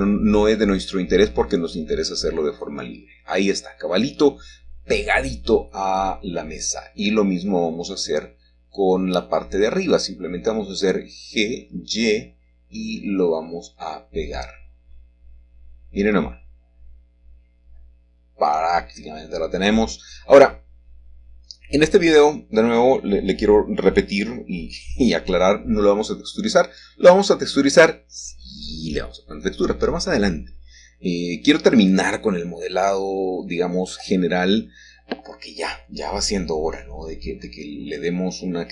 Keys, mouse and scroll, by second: 0.8-2.1 scroll up 1, 2.3 g, 2.8 z, 6.1 shift+click, 10.7 middle click, 14.2 y, 16.6 shift+click, 17.2-18.8 scroll down 2, 18.3 shift+middle click, 18.8 shift+middle click, 22.0 shift+middle click, 23.6-24.8 shift+middle drag, 25.8-26.9 middle drag, 26.9-27.5 scroll up 1, 27.1-28.5 shift+middle drag, 29.2 click, 30.6 click, 33.5-34.0 scroll up 1, 35.7-37.2 shift+middle drag, 37.7 right click.